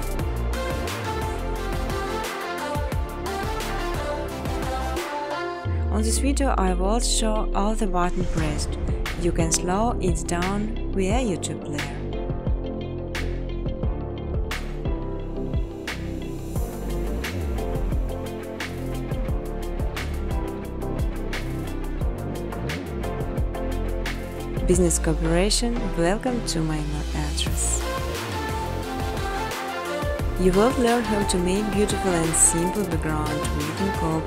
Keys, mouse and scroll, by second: 0.0-0.2 typing, 0.1 click, 1.8 click, 3.3 click, 3.6 typing, 6.5 click, 7.0 click, 9.2 click, 10.2 9, 12.4-18.6 typing, 14.9 Return, 16.3 click, 16.6 click, 17.0 click, 17.7 click, 18.9 click, 20.5 click, 22.7 click, 24.4-26.1 typing, 27.8 typing, 29.7-31.3 typing, 30.1 middle click, 30.1 scroll, 31.3-31.6 scroll, 32.4 space.